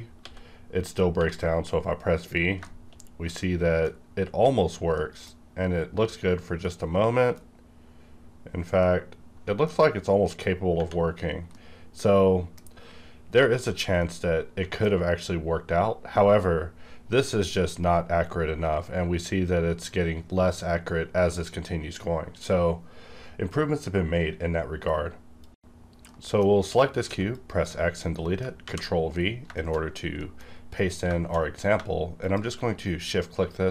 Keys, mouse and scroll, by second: 0.2-1.2 typing, 2.6-6.7 shift+middle drag, 4.9-6.7 middle drag, 10.7 Tab, 11.5-25.5 middle drag, 27.1 x, 27.3 click, 27.8-28.2 scroll down 1, 28.2 middle click, 28.6 ctrl+v, 29.0-29.4 scroll down 2, 29.5 shift+middle click, 30.1-31.0 scroll up 2, 30.2 middle click, 32.2 shift+click.